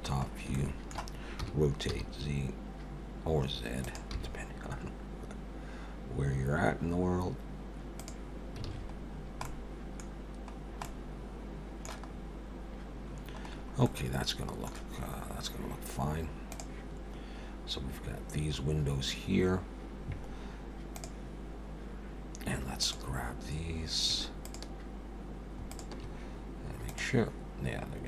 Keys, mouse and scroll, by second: 0.3 scroll up 1, 0.5 shift+middle click, 1.4 r, 4.1 g, 8.7 alt+a, 9.1-9.4 scroll down 3, 9.4 middle click, 10.5-11.3 scroll down 2, 10.8 middle click, 12.1-12.8 scroll up 5, 13.1-13.8 scroll down 5, 13.8 middle click, 15.0-15.4 scroll up 2, 22.8 click, 24.4 shift+click, 25.7 click.